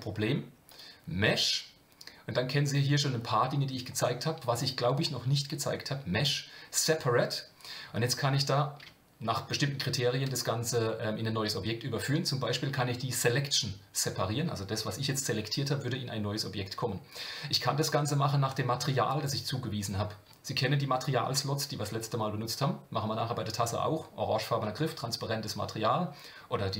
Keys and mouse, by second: 0.7-26.7 drag.